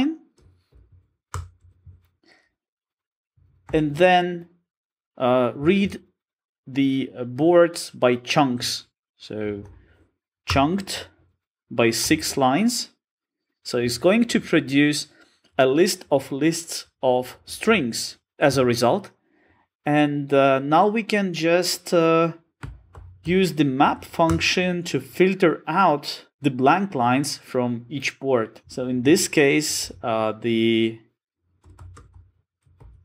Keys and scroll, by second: 1.3 Return, 10.5 Return.